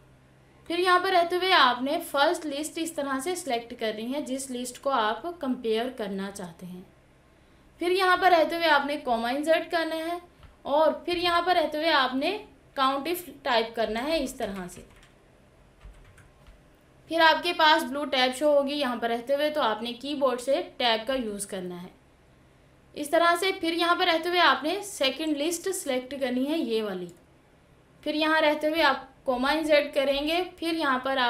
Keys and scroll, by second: 0.5 Tab, 20.7 Tab, 24.2 Tab.